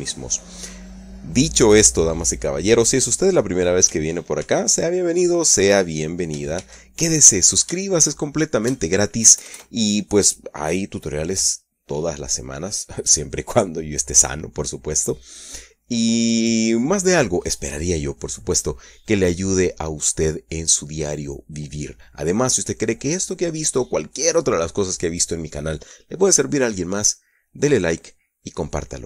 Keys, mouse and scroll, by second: 2.5 right click, 5.3 ctrl+c, 7.5 shift+c, 8.7 shift+right click, 9.4 shift+right click, 10.1 KP_Add.